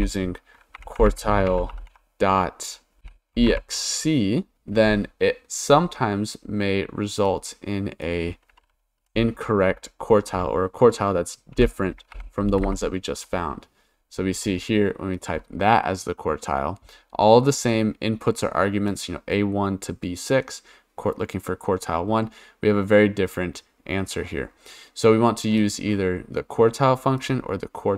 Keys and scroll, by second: 0.0-4.0 typing, 9.0 ,, 11.5 1, 12.1 shift+0, 12.6 Return.